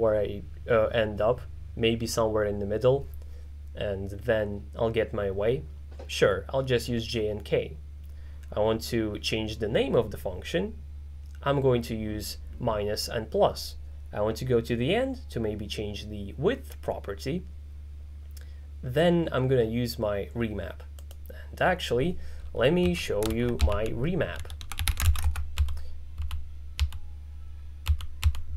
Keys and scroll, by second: 22.7-26.8 typing, 27.9 n, 28.3 n.